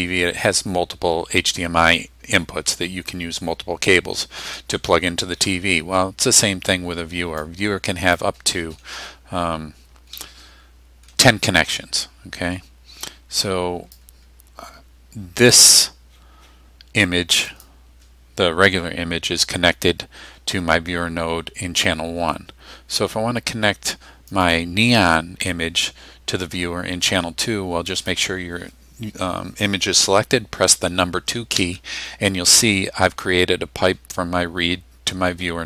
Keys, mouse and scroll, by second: 7.5-8.4 drag, 8.7-9.1 scroll up 1, 9.3-9.7 scroll down 1, 10.2-11.2 middle drag, 12.1-12.8 scroll up 2, 13.1-14.2 drag, 17.5 click, 24.4 click, 28.0 click, 31.6 2.